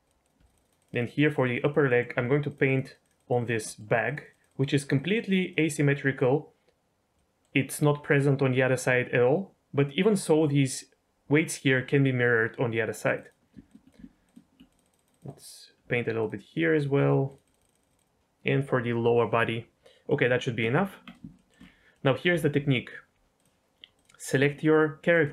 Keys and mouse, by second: 0.2 ctrl+click, 0.4 click, 0.7 click, 0.9 click, 1.0 click, 1.2 click, 1.4 click, 1.6 click, 1.8 middle click, 2.1 f, 2.6 click, 2.8 click, 3.0 click, 3.3 click, 3.6 middle click, 4.0 click, 4.3 click, 4.4 click, 4.7 click, 5.1 click, 5.3 click, 5.8 middle click, 7.1 middle click, 12.8 click, 13.1 click, 13.7 ctrl+click, 13.9 click, 14.2 ctrl+click, 14.6 click, 14.8 click, 15.1 click, 15.2 click, 15.4 click, 16.2 ctrl+click, 16.9 f, 17.4 click, 18.0 click, 20.1 middle click, 20.7 Tab, 21.3 shift+middle click, 21.9 middle click, 23.3 click, 24.5-25.1 shift+middle drag.